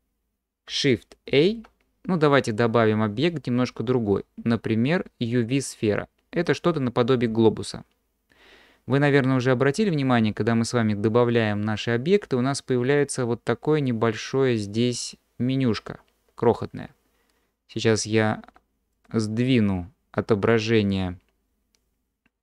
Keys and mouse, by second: 1.3 shift+a, 18.9 click.